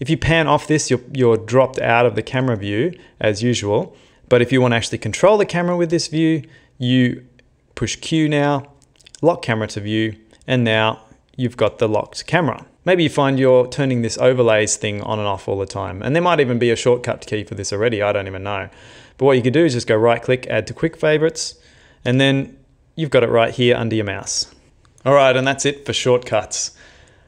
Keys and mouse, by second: 0.1 middle click, 6.0 q, 10.0 middle click, 10.9 ctrl+middle click, 12.4 shift+middle click, 14.1 click, 14.7 click, 15.4 click, 18.1 click, 19.5 right click, 22.1 q, 23.6 q, 24.3 q.